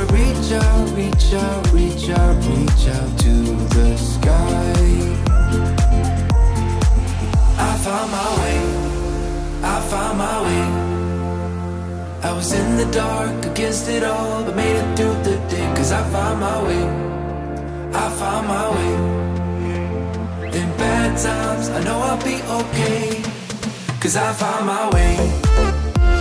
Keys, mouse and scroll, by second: 1.2-7.8 drag, 7.8 middle click, 11.0-13.3 drag, 13.8-16.1 typing, 16.5-19.0 drag, 19.5-22.6 typing, 22.1-25.7 drag, 24.0-25.7 typing, 25.7 middle click.